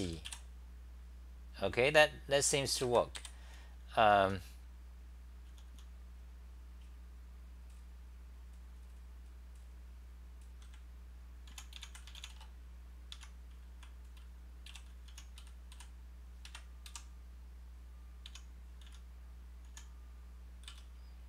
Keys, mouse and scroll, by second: 0.5 Home, 0.5 u, 2.8 ctrl+g, 2.9-5.7 typing, 11.3-12.0 typing, 13.2 Home, 13.6-16.9 typing, 18.3 o, 19.5-21.2 typing.